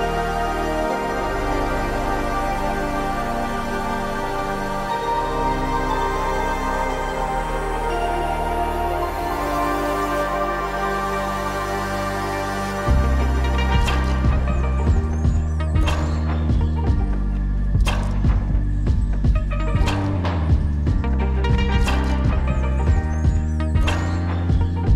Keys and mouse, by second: 0.9 Tab, 2.5 right click, 2.6 right click, 3.6-4.1 middle drag, 11.5 ctrl+r, 13.8 Tab, 14.8 click, 17.6 alt+e.